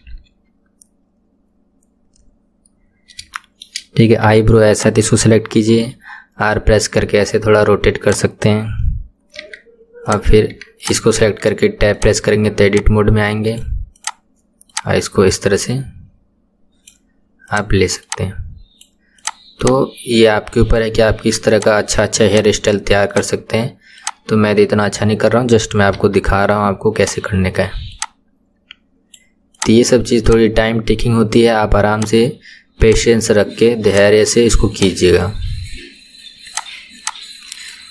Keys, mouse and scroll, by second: 0.0 KP_1, 2.9-3.4 scroll up 2, 3.4 shift+middle click, 4.3 Tab, 4.8 click, 5.8 r, 9.4 Tab, 10.1 click, 10.6 Tab, 10.8 click, 11.2 Tab, 12.0 click, 12.7 click, 14.0 click, 14.7 click, 17.5 click, 18.0 click, 19.2 click, 19.6 click, 21.6 click, 22.3 click, 23.1 click, 24.0 click, 26.0 KP_3, 27.0 click, 28.0 click, 29.6 click, 30.3 click, 32.0 click, 32.8 click, 33.9 click, 34.8 click, 36.5 click, 37.0 click.